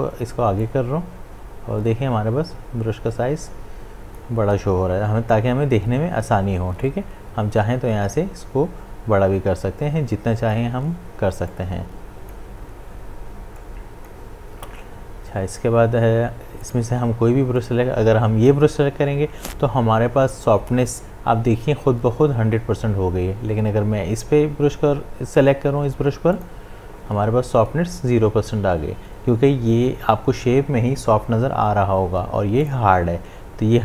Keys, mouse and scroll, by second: 0.6-6.6 drag, 6.8-16.4 drag, 16.6 click, 26.3 click, 32.6 click.